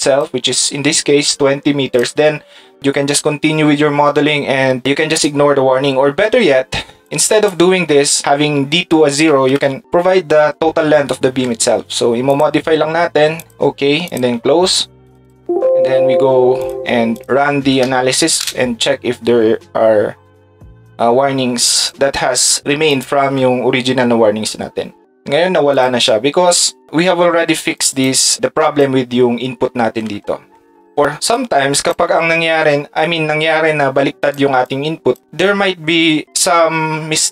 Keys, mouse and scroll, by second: 1.3 shift+click, 4.9-7.5 drag, 12.3 click, 34.2 ctrl+click, 34.6 ctrl+click.